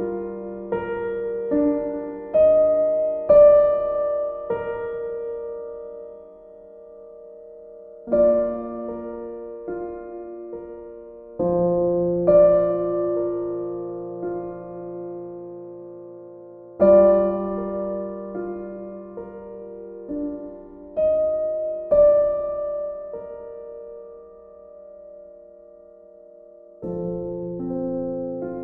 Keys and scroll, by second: 1.3 ctrl+z.